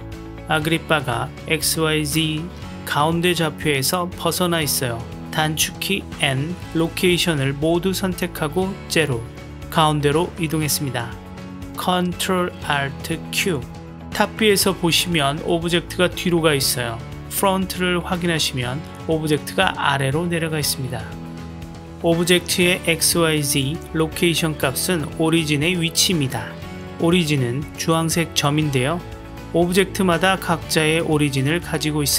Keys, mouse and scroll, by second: 1.1 Delete, 2.0-3.1 middle drag, 3.9-5.1 middle drag, 5.9 n, 7.7-9.1 drag, 9.8 click, 10.2 KP_Decimal, 10.8-12.0 middle drag, 12.7 ctrl+alt+q, 21.4 ctrl+alt+q, 22.3 click, 22.4 g, 24.1 drag, 29.2 shift+a, 30.7 s, 32.0 g.